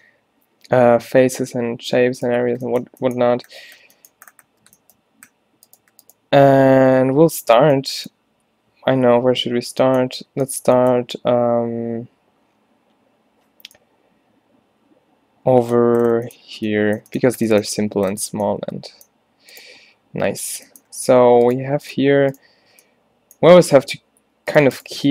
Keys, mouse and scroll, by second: 5.7-8.0 middle drag, 9.5 a, 21.0 a, 24.6 click, 25.0 f.